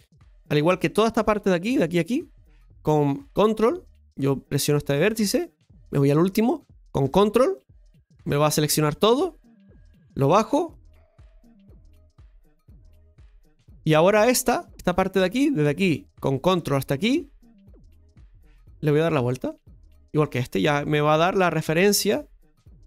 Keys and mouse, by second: 1.2 right click, 2.2 ctrl+shift+right click, 4.1 right click, 7.5 ctrl+right click, 9.5 click, 10.4-11.8 drag, 12.5-13.9 middle drag, 15.6 right click, 16.7 ctrl+right click, 17.7-20.2 drag, 20.2 right click, 21.3-22.8 shift+right drag.